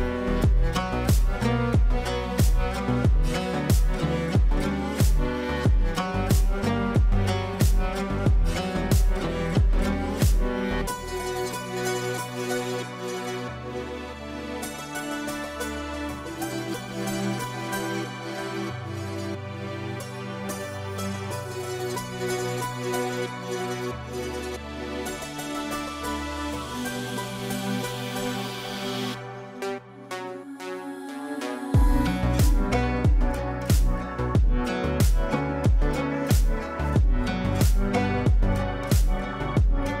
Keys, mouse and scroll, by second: 3.7-15.4 drag, 17.1 right click, 19.0-29.8 drag, 30.7 shift+Page_Up, 31.9 click, 32.4 F3, 33.1-40.0 drag.